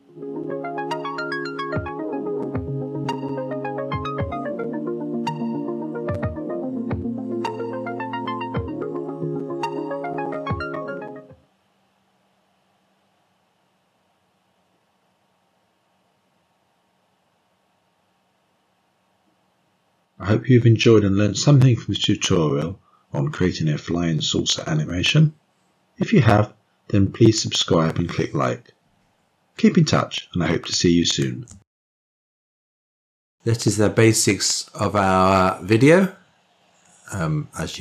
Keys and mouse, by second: 32.3 ctrl+space.